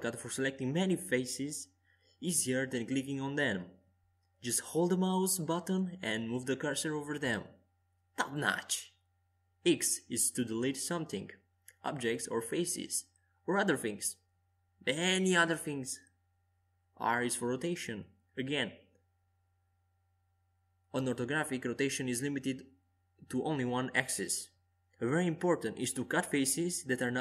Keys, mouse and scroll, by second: 0.3-6.8 middle drag, 5.2 click, 6.8 s, 10.7-13.2 drag, 13.8-15.9 middle drag, 17.8 right click, 20.6 KP_5, 21.1 KP_1, 23.0 KP_3, 26.4 middle click, 26.4 z.